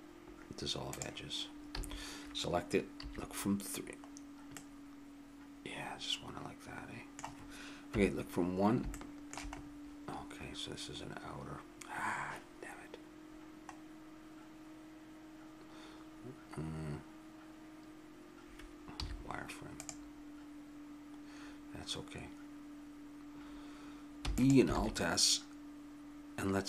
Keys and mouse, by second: 1.7 a, 3.0 KP_3, 4.1-5.1 middle drag, 5.5 middle click, 7.9 KP_1, 8.9 middle click, 19.0 z, 24.2 e, 24.7 alt+s.